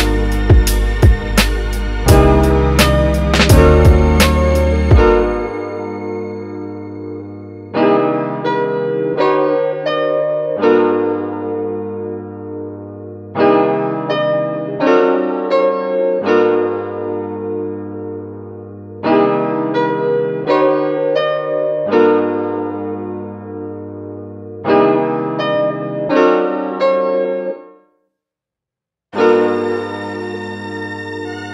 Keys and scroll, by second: 3.0 x, 6.9 x, 15.7 x, 18.5 f.